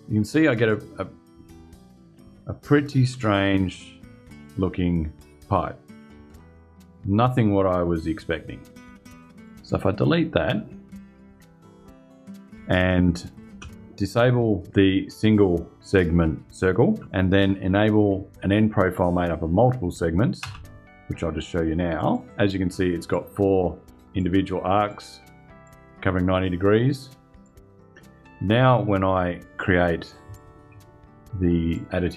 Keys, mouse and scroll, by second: 9.9 click, 11.6 Delete, 12.9 click, 13.2 space, 13.8 click, 16.7 space, 20.1 space, 21.7 click, 22.8 click, 23.9 click, 24.6 click, 25.3 click, 27.1 click, 29.3 click, 30.0 ctrl+click, 31.4 click.